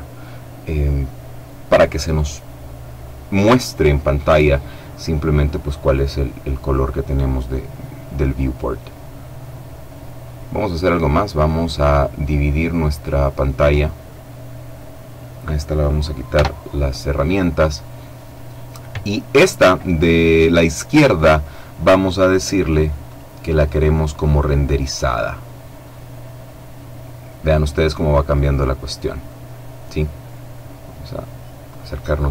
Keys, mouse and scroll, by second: 5.6 click, 12.3-15.3 drag, 16.0 t, 22.7 click, 24.3 click, 30.1-30.7 scroll up 2, 30.7-31.3 scroll down 2, 31.3-32.2 scroll down 1, 32.2-32.3 scroll up 1.